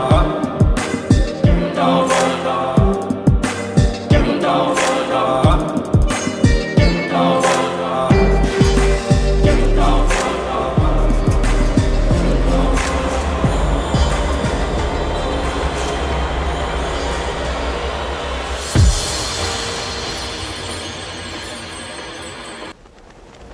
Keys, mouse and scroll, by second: 9.6 click, 13.3 click, 13.8 right click, 17.1 click, 19.4 click, 21.7 ctrl+click, 23.2 click.